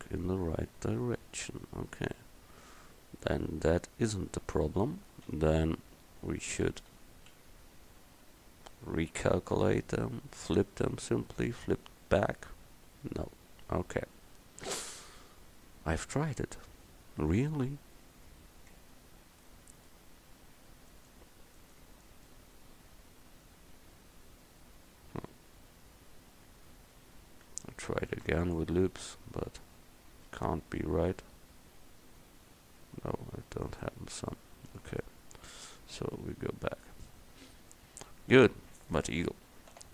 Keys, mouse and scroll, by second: 4.5 Tab, 5.4 a, 6.0 Tab, 7.0 a, 7.4 a, 9.1-17.4 drag, 18.8 Tab, 21.0 right click, 23.8 Tab, 24.9 a, 28.2 ctrl+r, 34.4-36.1 middle drag, 36.1 ctrl+z, 37.5 Tab, 39.8 n.